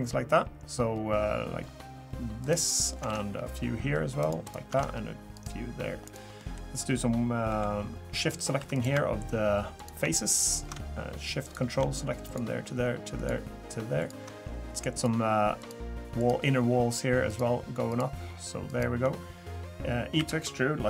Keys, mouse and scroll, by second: 3.1 ctrl+r, 4.7 ctrl+r, 6.4 middle click, 8.2 click, 8.6 3, 8.7 click, 9.8 shift+click, 11.4 click, 12.2 ctrl+shift+click, 14.9 shift+click, 20.2 e.